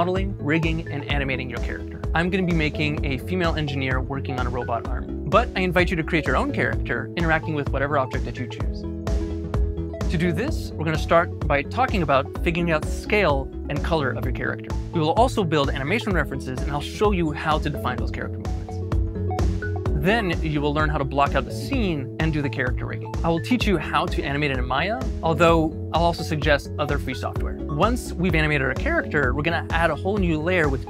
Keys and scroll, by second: 0.4 w, 1.0 z, 5.4 s, 7.6 w, 25.1 z, 27.9 Tab, 29.7 s.